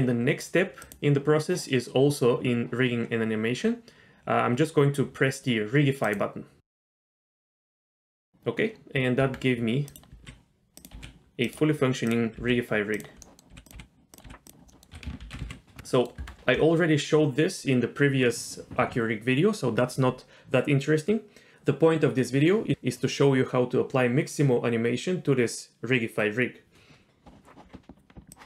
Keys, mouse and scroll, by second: 0.8-3.8 drag, 6.0 click, 9.2 Tab, 9.9 click, 10.2 g, 11.0 r, 12.1 click, 12.4 g, 13.2 middle click, 13.5 r, 13.7 g, 14.3 r, 14.7 middle click, 14.9 a, 15.2 alt+r, 15.4 alt+g, 15.9 middle drag, 16.2 Tab.